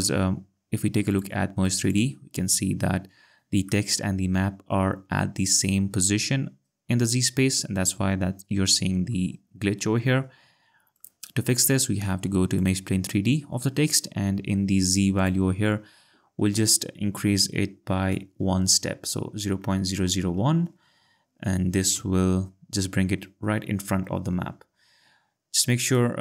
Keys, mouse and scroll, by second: 1.1 click, 1.7 click, 3.7 alt+click, 9.1 alt+click, 10.9 click, 12.6 click, 15.2 click, 20.0 0, 20.5 1, 22.0 Return, 25.9 click.